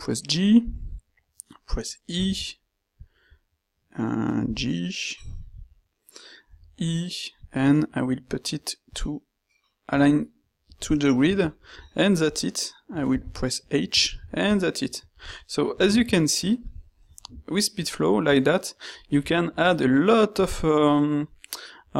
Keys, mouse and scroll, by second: 2.2 e, 4.4 g, 6.6 e, 10.2 middle click, 10.3 click, 10.4 middle click, 10.5 click, 10.8 click, 13.2 h.